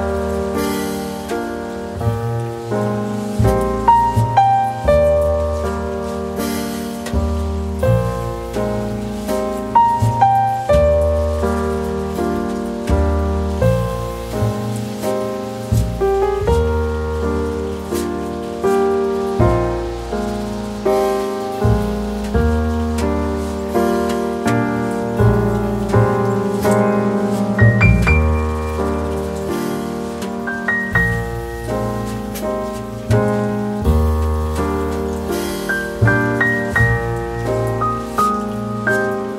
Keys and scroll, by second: 7.6 Delete, 16.8 Escape.